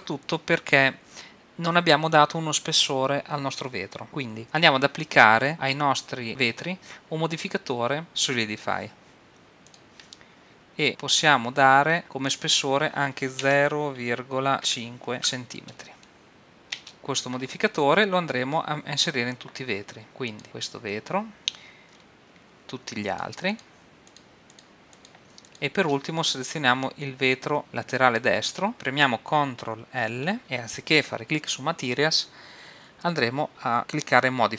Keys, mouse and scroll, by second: 8.0-9.7 drag, 12.3-14.1 drag, 20.3-21.9 drag, 21.9-23.1 middle drag, 23.1-27.5 drag, 28.7 click, 30.4 ctrl+l.